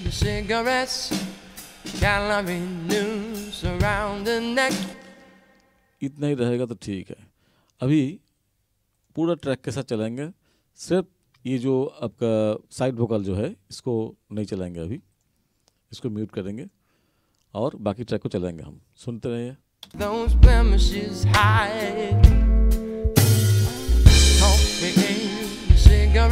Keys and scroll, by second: 4.9 space, 19.9 space, 22.1 n.